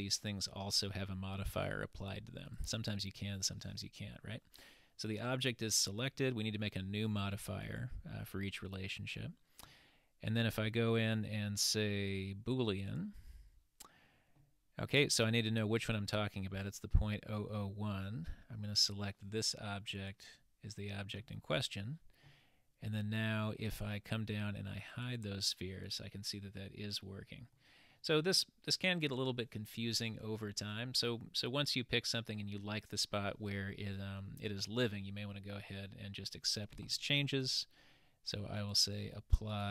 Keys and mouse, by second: 7.8-13.0 drag, 18.8 click, 24.9 click, 26.2-27.7 middle drag, 27.9-32.7 middle drag, 35.3-36.4 middle drag, 37.4-38.8 drag, 39.5-39.7 drag.